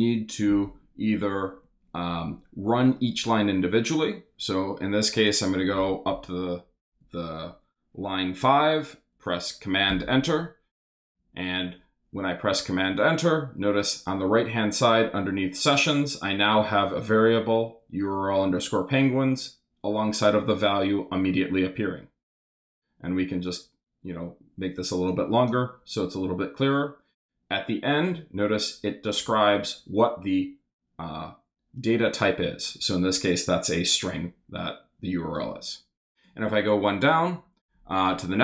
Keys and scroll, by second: 9.9 super+Return.